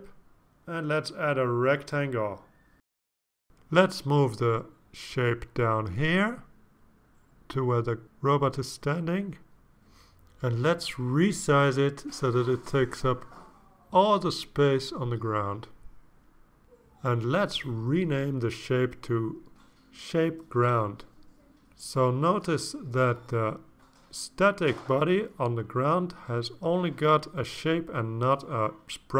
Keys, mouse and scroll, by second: 1.2 click, 2.8 click, 3.5 ctrl+scroll down 2, 4.2 ctrl+scroll down 2, 4.5 click, 5.0-5.3 ctrl+scroll down 4, 6.0 click, 6.3 click, 7.4-7.7 drag, 8.2 click, 9.9 click, 10.5 click, 11.4 click, 11.9 click, 12.8 ctrl+scroll down 2, 13.3 click, 13.6 click, 14.1 click, 15.1 click, 16.1 click, 16.6-17.5 drag, 17.7 click, 18.1 click, 19.9 click, 20.3-21.6 typing.